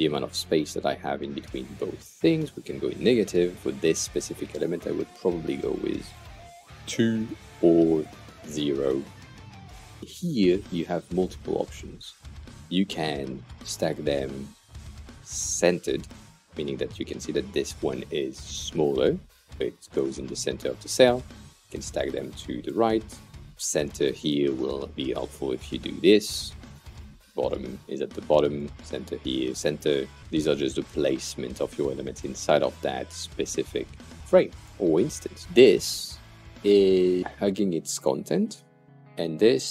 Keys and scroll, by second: 7.9 0, 8.0 Return, 33.5 super+z.